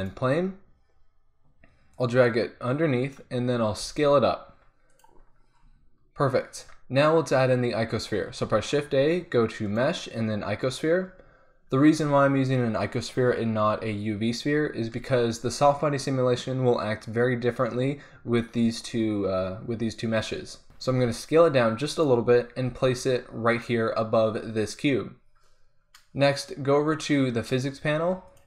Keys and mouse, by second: 1.9-3.1 drag, 3.8 s, 8.4 shift+a, 20.9 s, 22.0-24.0 drag, 22.7 g, 28.3-28.4 drag.